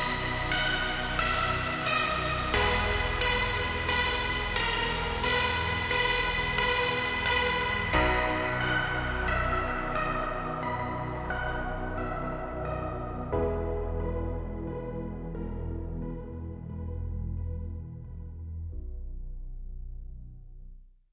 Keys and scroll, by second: 0.0-0.2 typing, 1.7 5, 1.9 Return, 2.2 space, 4.6 t, 5.5 r, 6.7-9.2 typing, 14.0 l, 14.9 space, 16.8 p, 19.5 l, 20.5 space, 20.9 p.